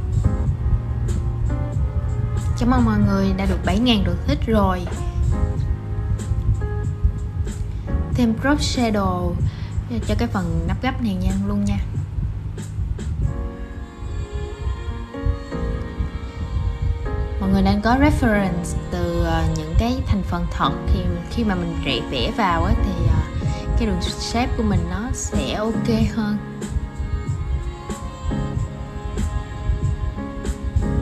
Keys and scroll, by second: 22.4 super+[.